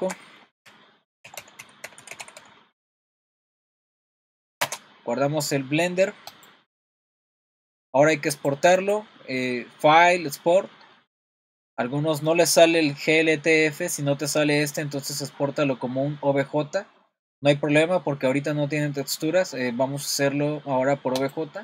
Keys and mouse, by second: 8.4 click, 8.8-21.6 drag.